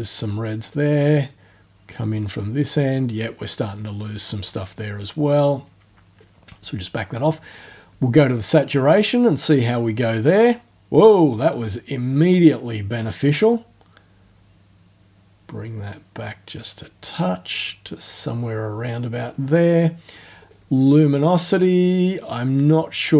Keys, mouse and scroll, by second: 0.7-4.6 drag, 4.6-5.4 scroll up 2, 5.4 click, 7.7 click, 9.6-11.5 drag, 12.5-19.3 drag, 20.4 click, 21.9-23.1 drag.